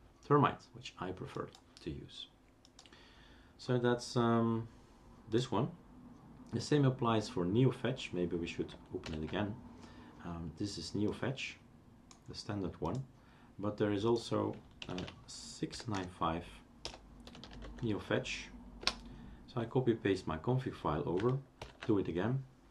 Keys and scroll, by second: 9.1 ctrl+alt+t, 15.0-17.9 typing, 18.8 Return, 21.7 ctrl+alt+t.